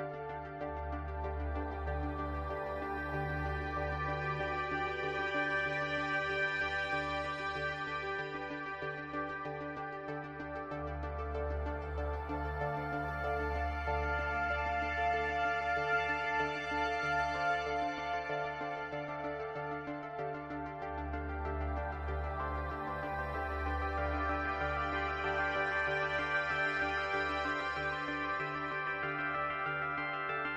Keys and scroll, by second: 18.2 space, 21.4 space.